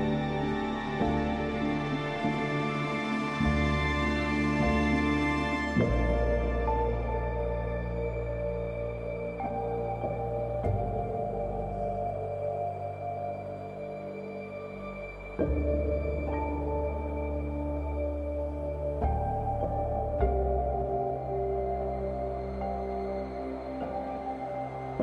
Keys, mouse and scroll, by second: 3.7-6.8 drag, 9.8-14.0 drag, 14.0-16.0 alt+drag.